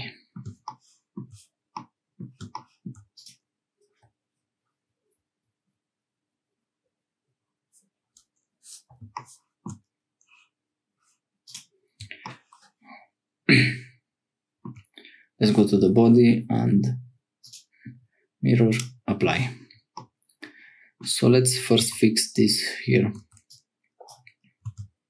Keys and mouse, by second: 1.7 click, 17.4 click, 18.8 click, 19.9-21.1 drag, 21.8 Tab, 23.2 1, 23.4 click, 24.6 x.